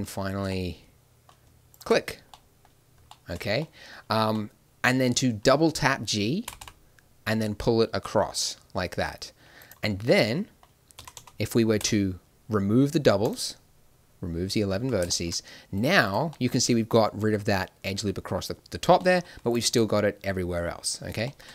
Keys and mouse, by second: 1.7-2.7 drag, 2.3 middle click, 2.7 middle click, 6.4 g, 10.9 a, 11.1 a, 11.8 w, 14.7 a, 15.1 middle click, 15.7 right click, 16.3 middle click, 16.4-17.9 drag, 19.4-21.3 drag.